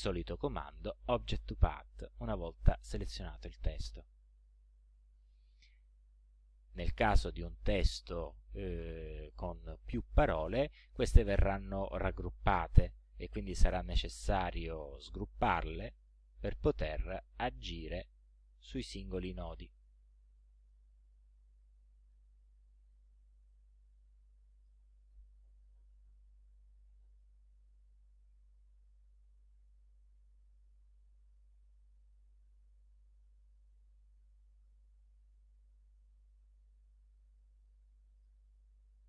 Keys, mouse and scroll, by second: 3.9 click, 13.4 right click, 13.7 scroll up 2, 15.4 click, 17.0 click, 18.1 ctrl+scroll up 2, 19.0 ctrl+scroll up 2, 19.8-20.9 ctrl+drag, 21.8 click, 22.5 ctrl+scroll up 2, 23.5-24.9 ctrl+drag, 26.3 shift+Up, 27.6-27.9 ctrl+scroll down 2, 28.7 ctrl+scroll up 2, 29.7-30.4 ctrl+scroll up 4, 31.3 ctrl+click, 32.0-32.5 ctrl+scroll up 2, 32.9 ctrl+scroll up 2, 36.6 ctrl+scroll up 2, 37.3 ctrl+click, 38.2 ctrl+click.